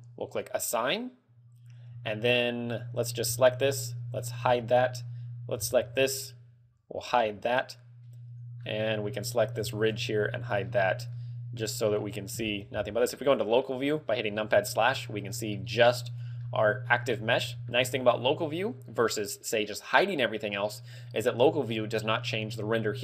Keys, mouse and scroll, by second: 0.4 click, 1.0 click, 2.3 a, 3.4 l, 4.3-4.7 scroll down 5, 5.0 h, 6.0 l, 7.7 h, 8.1 middle click, 9.8 l, 10.6 h, 10.8 z, 10.9-11.3 scroll down 2, 11.3 middle click, 12.5 KP_Divide, 13.2 scroll up 5, 13.7 middle click, 14.4 scroll up 2, 14.8 shift+middle click, 15.1-15.4 scroll up 2, 15.5 shift+middle click, 15.8 scroll up 2, 16.2 right click, 16.5 middle click, 17.3-17.6 scroll up 2, 17.7 shift+middle click, 18.1 middle click, 18.8 scroll up 1.